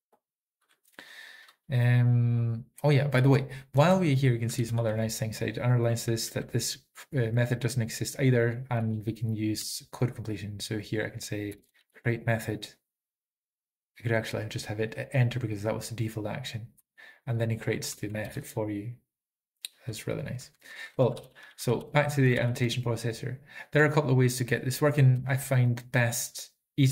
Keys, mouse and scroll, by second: 0.7 Down, 0.7-6.2 Up, 0.8 typing, 0.9 Down, 3.2 Down, 3.8 Down, 6.1 alt+b, 6.1 Right, 6.2 ctrl+g, 6.2 ctrl+p, 6.2 ctrl+a, 6.2 ctrl+s, 6.2 ctrl+n, 6.2 Return, 6.2 ctrl+e, 6.2 alt+f, 6.2 typing, 6.3 Right, 9.0 Left, 9.0 alt+Return, 9.7 Tab, 11.8-12.5 typing, 16.9 Return, 18.4 ctrl+a, 18.4 ctrl+s, 21.2 Up, 21.2 alt+f, 21.3 alt+f, 21.5 alt+f, 21.7 alt+f, 23.9 alt+b, 23.9 Down, 24.3 Right, 24.3 Down, 24.3 ctrl+n, 24.3 alt+Return, 24.3 ctrl+p, 24.3 alt+b, 24.3 Left, 24.3 Tab, 24.3 ctrl+a, 24.3 ctrl+s, 25.3 Down.